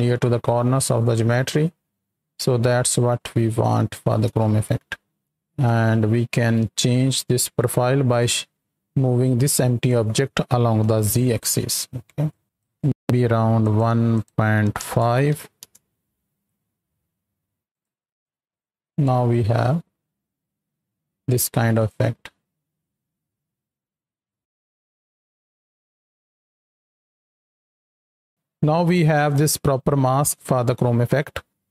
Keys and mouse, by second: 5.5 right click, 8.0 click, 8.8-9.3 drag, 10.7 KP_7, 12.2 shift+click, 12.7 click, 13.5 click, 14.1-15.6 drag, 17.6 shift+click, 18.2-21.9 shift+drag, 31.5 ctrl+space.